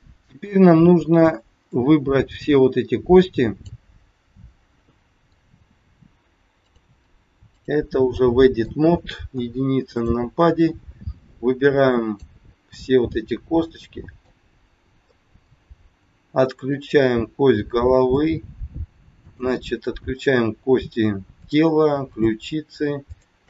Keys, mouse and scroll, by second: 1.7 click, 4.3 middle click, 6.6 click, 8.1 middle click, 9.3 KP_1, 10.0 click, 10.6 click, 13.0 middle click, 15.1 middle click, 16.6 shift+click, 18.1 shift+click, 20.1 shift+click, 21.3 shift+click, 23.0 shift+click.